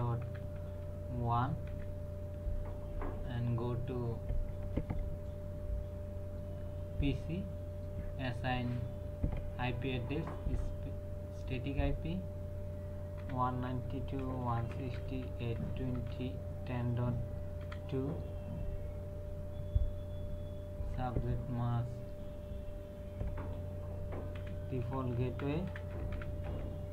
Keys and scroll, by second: 0.0-0.6 typing, 1.7 KP_1, 13.2-16.1 typing, 17.6 KP_2, 24.3-26.5 typing.